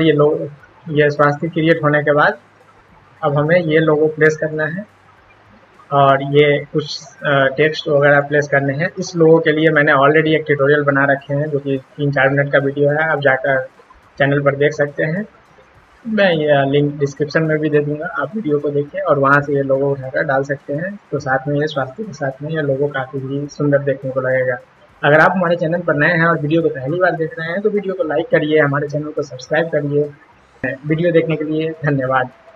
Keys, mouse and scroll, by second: 3.0 click, 7.3 click, 8.0 click, 9.3 click.